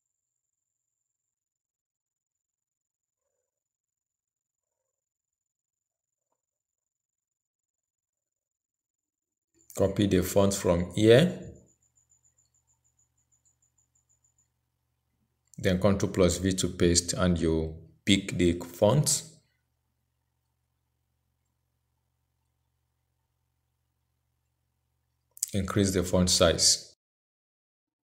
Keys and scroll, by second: 10.3 ctrl+c, 16.5 ctrl+v.